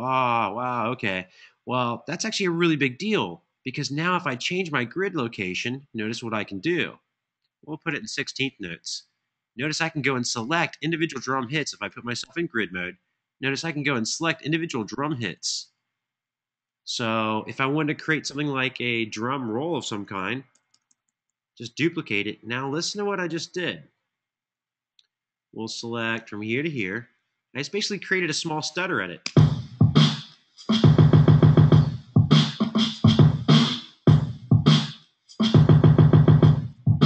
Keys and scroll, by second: 20.2 super+d, 20.4 super+d, 20.8 super+d, 28.9 space.